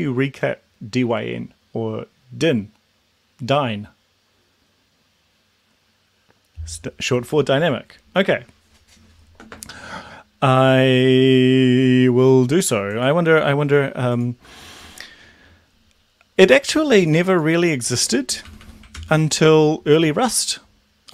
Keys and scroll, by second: 18.5 Delete, 18.7 Delete, 18.9 ctrl+s.